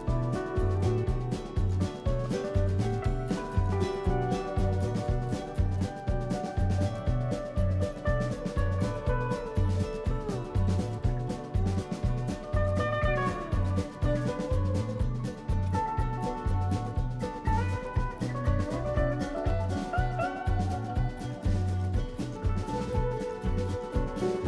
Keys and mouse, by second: 0.2 Tab, 1.9 click, 2.9 click, 3.3 n, 3.7 click, 4.0 F2, 9.1 shift+d, 10.3 s, 11.7 F2, 12.3 BackSpace, 12.5 BackSpace, 12.8 BackSpace, 13.4 l, 14.5 ctrl+a, 15.4 ctrl+a, 16.3 click, 17.2 n, 17.8 click, 19.3 click, 20.5-24.1 drag, 24.3 click.